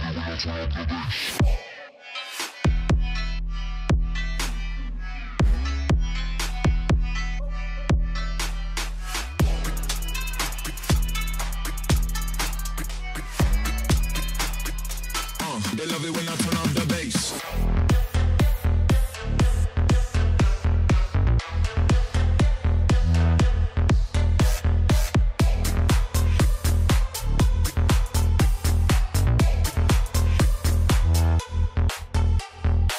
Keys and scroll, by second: 2.7-4.5 typing, 6.9 2, 9.5 z, 10.6 c, 11.5 d, 12.1 4, 12.2 Return, 14.0 e, 17.9-20.3 typing, 21.7 j, 32.2-32.9 typing.